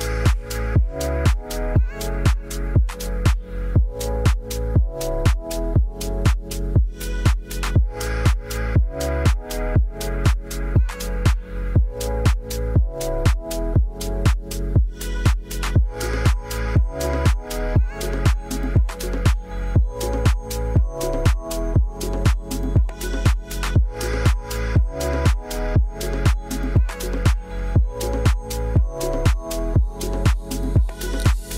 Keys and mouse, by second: 0.3 middle drag, 2.4 click, 3.7 click, 4.9 click, 5.3-6.9 drag, 9.0 click, 10.0 middle drag, 11.0 click, 11.8 click, 12.2 middle drag, 13.0 click, 14.0 click, 14.7-15.0 middle drag, 15.4 click, 16.0 space, 19.0 click, 21.1 space, 21.4 middle drag, 22.3 ctrl+s, 22.8-24.7 middle drag, 25.2 middle drag, 26.2-26.5 drag, 27.3-29.1 middle drag, 29.1 click, 29.6 g, 30.1 click, 30.4 middle drag.